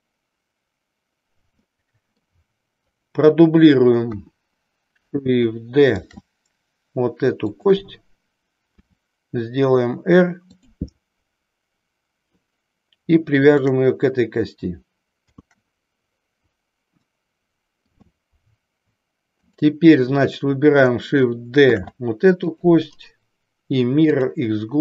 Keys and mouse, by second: 1.6 middle click, 2.9 click, 7.5 click, 10.6 click, 13.5 shift+click, 19.4 click, 22.5 click, 23.1-24.4 right drag.